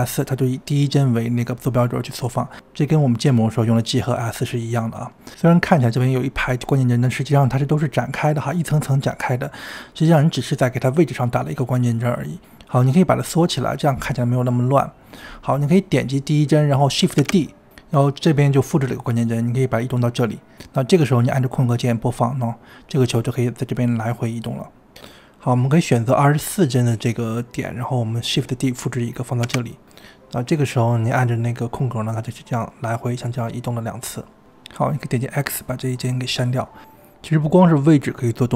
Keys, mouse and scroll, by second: 1.6 click, 2.4 click, 6.9 click, 7.8 click, 8.7 click, 9.8 click, 11.4 click, 13.0 click, 14.3 click, 15.3 click, 17.2 ctrl+d, 21.5 space, 23.5 space, 24.9 click, 25.1 space, 25.4 space, 25.6 drag, 25.9-26.8 drag, 27.3 ctrl+z, 28.4 click, 29.4 shift+d, 31.0 click, 31.7 space, 34.6 click, 34.7 x, 36.7-38.5 drag.